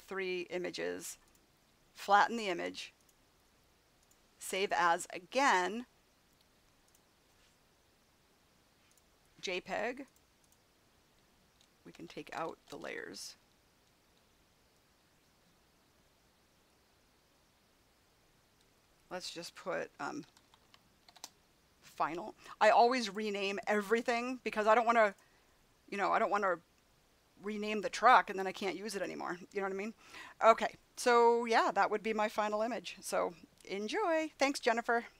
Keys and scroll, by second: 11.8 BackSpace, 19.9-21.5 typing.